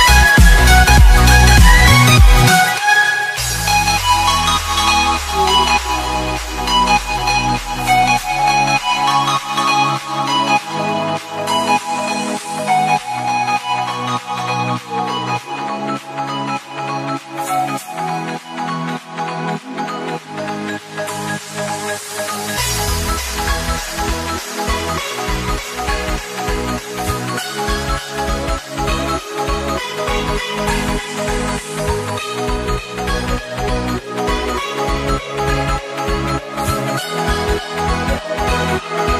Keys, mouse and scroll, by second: 2.2 Return, 3.5 click, 5.4 click, 11.7 click, 13.0-16.9 scroll down 1, 18.3 click, 25.4-25.8 scroll up 1, 26.6 click, 29.1 Delete, 30.0 click, 30.8 alt+Tab, 31.2-31.5 scroll up 1, 31.6 click, 32.1 alt+Tab, 33.6 click, 34.4 alt+Tab, 35.0 click, 37.6 Insert, 38.2 BackSpace, 38.9 g, 39.1 space.